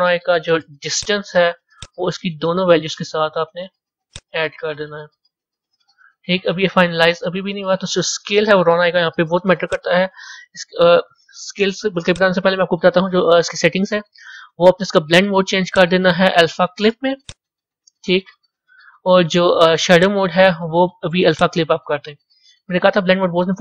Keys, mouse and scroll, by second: 2.8-5.8 drag, 12.0 click, 14.1 scroll down 3, 17.3-19.3 drag, 21.4-23.5 drag.